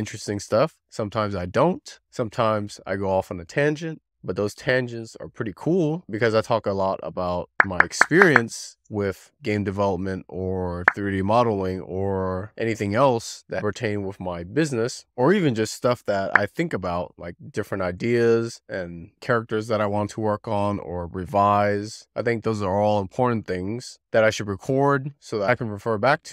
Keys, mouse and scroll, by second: 0.2 click, 0.5 z, 0.7 click, 0.9 middle click, 1.4 z, 1.6 middle click, 2.3 click, 3.8 middle click, 4.6 middle click, 5.4 click, 6.6 middle click, 7.1 scroll up 2, 7.3 middle click, 7.5 scroll down 3, 7.6 click, 9.7 click, 10.4 middle click, 12.2 middle click, 12.4 scroll down 2, 12.6 alt+middle click, 12.7 scroll up 6, 12.9 shift+middle click, 13.9-14.3 scroll up 5, 14.3-14.6 scroll down 3, 14.6-15.4 middle drag, 16.2 middle click, 16.6 middle click, 17.9 scroll up 1, 21.6 w, 21.8 3, 21.9 click, 22.0 click, 22.3 middle click, 22.3 click, 22.5 click, 22.6 click, 22.8 middle click, 23.0 click, 23.5 middle click, 23.5 click, 24.2 middle click, 24.3 click, 24.6 middle click, 24.8 click, 25.3 middle click.